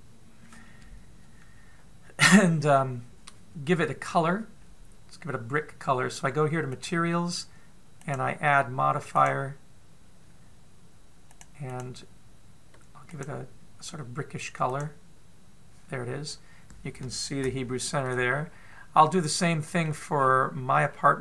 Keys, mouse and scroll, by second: 7.3 click, 8.6 click, 10.4 click, 12.2 click, 16.8 scroll up 1, 17.1-18.0 scroll down 1, 18.0 shift+middle click, 18.0 scroll down 1, 18.8-19.4 scroll up 2, 19.6 middle click, 20.8-21.2 scroll down 1.